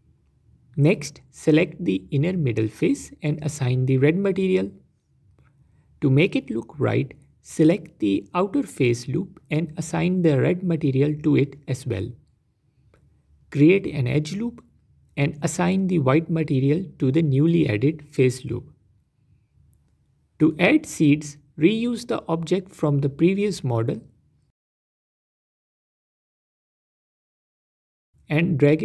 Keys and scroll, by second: 13.6 ctrl+r, 15.2 Tab, 21.6 Tab.